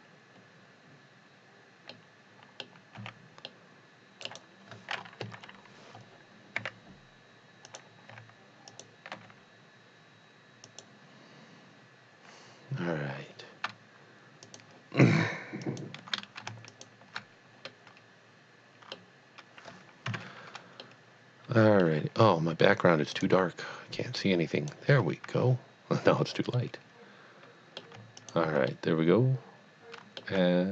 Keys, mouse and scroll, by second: 1.9 click, 1.9 middle click, 2.3 middle click, 3.1 c, 3.5 middle click, 3.8 middle click, 4.2 right click, 5.2 KP_1, 6.5 e, 7.7 click, 8.1 r, 8.7 click, 9.2 g, 10.7 click, 14.4 click, 15.6 alt+click, 16.7 alt+shift+click, 17.7 middle click, 20.1 KP_Divide, 21.0 middle click, 21.2 middle click, 23.2 click, 24.2 click, 26.5 middle click, 27.0 middle click, 28.2 alt+click, 28.8 middle click.